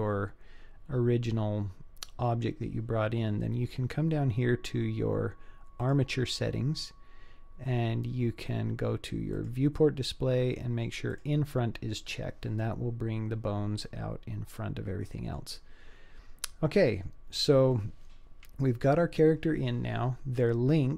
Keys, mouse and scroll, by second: 5.8 click, 9.4 click, 11.2 click, 13.9-15.4 middle drag, 15.9-16.4 scroll down 1.